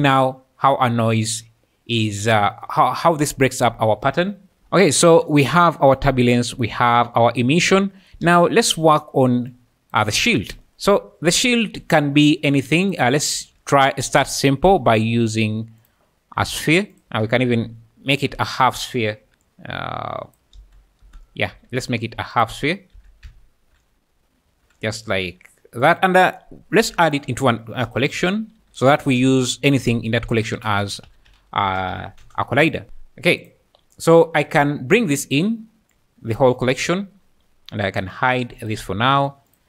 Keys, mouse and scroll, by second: 4.6 space, 8.2 space, 12.9 click, 13.2 shift+click, 13.4 shift+a, 16.4 s, 17.1 Tab, 17.1 g, 18.1 KP_1, 19.2 KP_3, 19.3 z, 19.4 click, 20.6 space, 21.0 space, 21.5 x, 22.6 Tab, 22.9 z, 23.2 ', 24.5-39.6 typing, 25.8 click, 38.6 click.